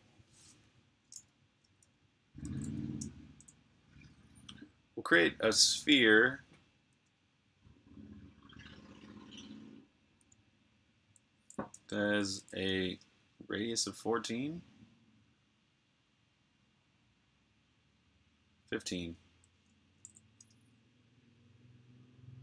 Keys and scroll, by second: 2.3 super+a, 3.3 BackSpace, 12.1-12.8 typing, 19.8 typing.